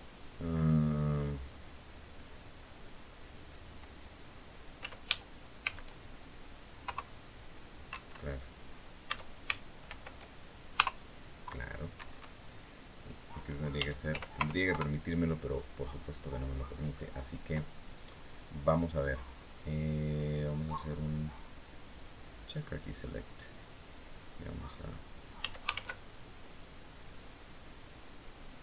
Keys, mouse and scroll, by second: 4.5 s, 5.3 shift+x, 6.5 KP_0, 7.6 Escape, 8.8 s, 9.6 shift+y, 10.5 KP_0, 11.7 Escape, 13.5 s, 13.8 z, 14.1 KP_0, 14.4 KP_Enter, 16.1-16.5 scroll down 2, 16.6-17.0 scroll up 2, 20.6 click, 22.2 click, 25.1 s, 25.5 shift+z, 28.0 click.